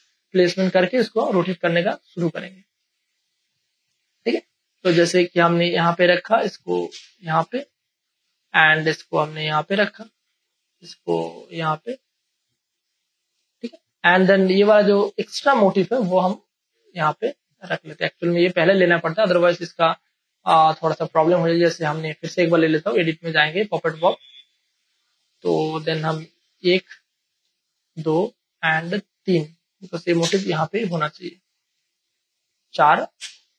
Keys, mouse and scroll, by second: 0.5-2.8 drag, 2.8 space, 3.0 click, 4.0 ctrl+click, 4.4 click, 4.9 ctrl+click, 5.7 click, 7.5 space, 7.7 click, 8.0 space, 9.2-13.4 drag, 13.4 space, 13.6 click, 13.9 space, 15.3 click, 15.5 space, 15.7 click, 16.0 space, 16.8 click, 17.7 space, 17.9 click, 18.2 space, 18.9 space, 18.9 click, 20.2 click, 20.8 space, 21.1 ctrl+click, 21.5 click, 26.4 click, 26.6 space, 26.9 ctrl+click, 27.8 click, 29.5 space, 30.2 click, 30.9 space, 31.1 click, 31.4 space, 32.6 click.